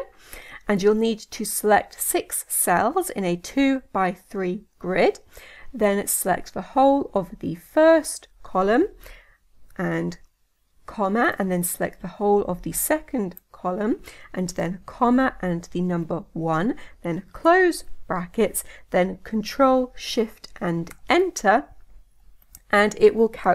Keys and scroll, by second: 0.0 Tab, 19.4 shift+Return.